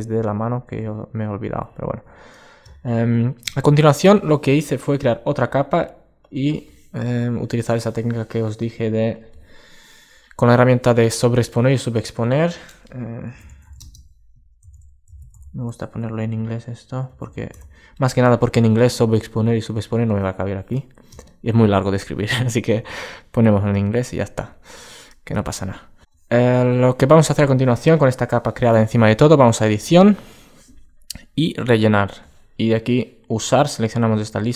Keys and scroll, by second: 1.5 super+space, 24.2 super+space.